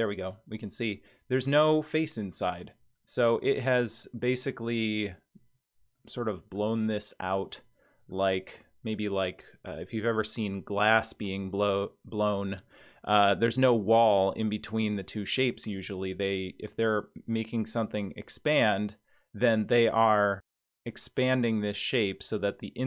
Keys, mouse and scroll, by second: 5.3-5.6 scroll down 5, 6.0-6.7 middle drag, 6.8 scroll down 2, 7.4-8.1 middle drag, 8.3-9.0 scroll down 2, 12.6-13.1 middle drag.